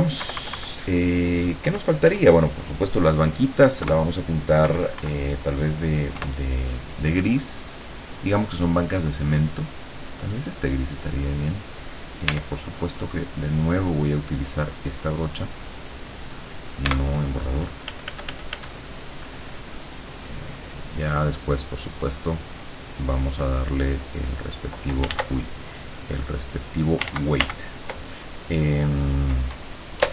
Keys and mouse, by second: 0.3 KP_Subtract, 1.7 KP_Add, 3.9 KP_Add, 4.7 KP_Subtract, 6.2 KP_Add, 7.7 click, 10.1 click, 12.3 e, 13.3 click, 14.6 click, 16.9 e, 17.9 f, 18.9-24.9 drag, 25.2 ctrl+z, 25.5-27.1 ctrl+drag, 27.2 ctrl+z.